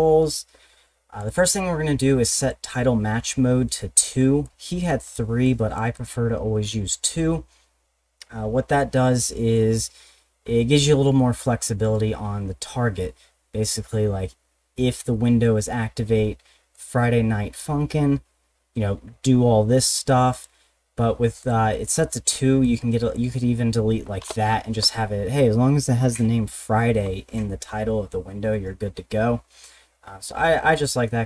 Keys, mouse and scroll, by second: 1.2 click, 1.3 click, 2.4 click, 4.4 click, 5.0 click, 5.4 click, 5.9 click, 16.7 click, 20.3 click, 21.4 click, 22.6 click, 24.2 BackSpace, 30.3 ctrl+z.